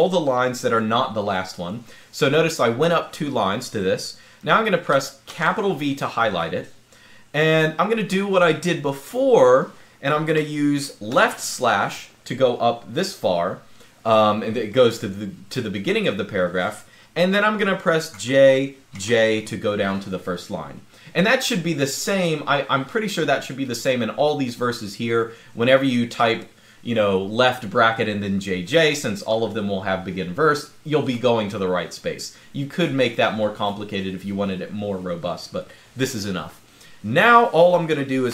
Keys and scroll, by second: 5.1 shift+v, 10.9 shift+[, 17.9 j, 18.7 j.